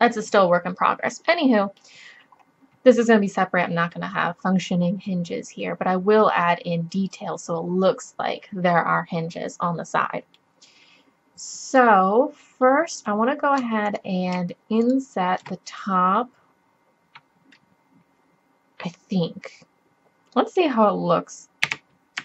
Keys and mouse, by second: 1.0 click, 2.6-3.7 middle drag, 11.4 middle click, 13.9 middle click, 14.3-15.8 drag, 15.9-17.8 drag, 21.7 e.